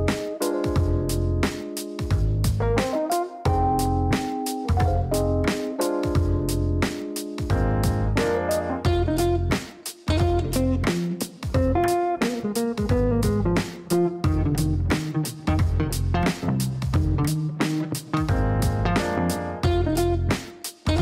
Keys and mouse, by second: 2.7 click, 4.4 click, 5.2 click, 14.1-15.3 typing, 15.6 Down, 17.7-21.0 typing, 19.6 KP_Add.